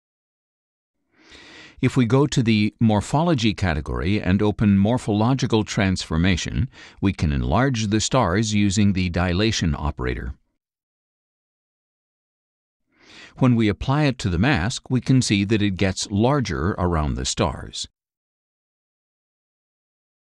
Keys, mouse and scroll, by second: 1.1 middle click, 1.2-2.1 scroll down 1, 3.4 click, 4.8 click, 7.3 click, 9.0 click, 9.8 click, 10.7 click, 11.3 click, 13.0-15.3 drag.